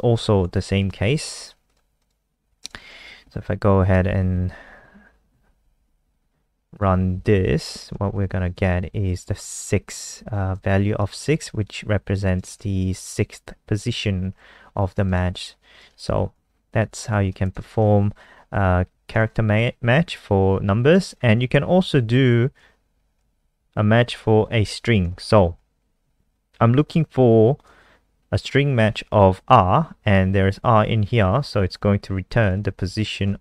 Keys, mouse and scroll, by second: 0.1 Left, 0.2 shift+End, 0.6 ctrl+c, 0.8 click, 1.7 click, 2.0 click, 2.4 Right, 2.8 ;, 3.1 Home, 3.3 Delete, 4.1 Delete, 5.3 ctrl+shift+Right, 5.5 ctrl+shift+Right, 5.6 ctrl+shift+Right, 5.8 ctrl+shift+Right, 5.9 ctrl+shift+Right, 6.3 ctrl+shift+Right, 6.7 Delete, 7.0 Delete, 7.7 click, 7.9 ctrl+s, 8.2 F5, 10.5 click, 11.4 alt+click, 12.2 click, 15.1 click, 16.5 Left, 17.0 End, 17.2 shift+Home, 17.5 BackSpace, 17.7 BackSpace, 19.1 Return, 20.9 click, 21.5 shift+End, 21.9 ctrl+c, 22.1 Down, 22.2 Down, 22.6 shift+End, 22.6 ctrl+c, 22.6 Down, 22.6 ctrl+v, 23.0 Home, 23.2 ctrl+shift+Right, 23.4 ctrl+shift+Right, 23.6 ctrl+shift+Right, 23.7 ctrl+shift+Right, 23.9 ctrl+shift+Right, 24.0 ctrl+shift+Right, 24.2 ctrl+shift+Right, 25.6 End, 27.6 click, 32.6 ctrl+s.